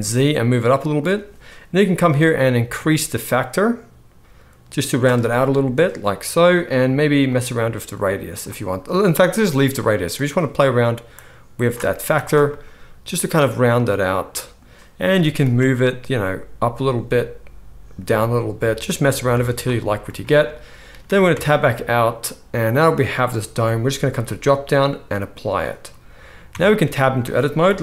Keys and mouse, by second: 1.9-19.2 drag, 11.9 z, 15.1 g, 19.2-24.1 middle drag, 21.3 Tab, 24.1-27.8 drag, 26.4 Tab, 27.6 KP_1.